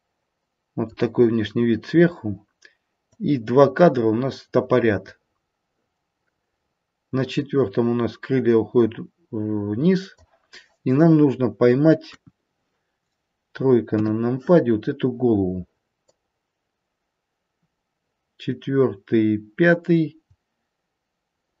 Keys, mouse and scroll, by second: 3.1 click, 12.0 KP_1, 14.0 KP_3, 14.6-16.1 scroll up 2, 16.1 click.